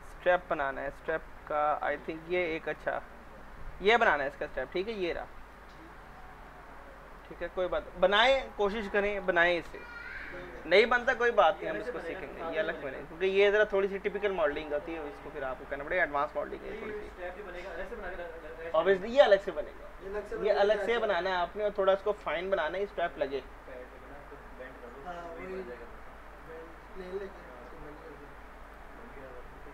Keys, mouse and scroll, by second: 0.8-1.1 scroll up 1, 1.1-1.8 scroll down 1, 2.7 click, 5.4 right click, 7.1 click, 9.1 ctrl+v, 9.7 Return, 26.4 click.